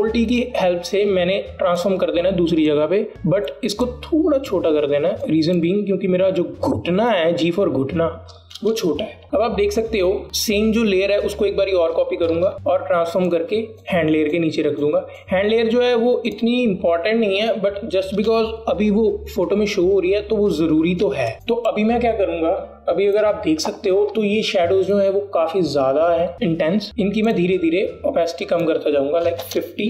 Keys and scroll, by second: 0.3 ctrl+t, 9.2 alt+Return, 12.6 ctrl+j, 13.1 t, 21.3 space, 21.5 space.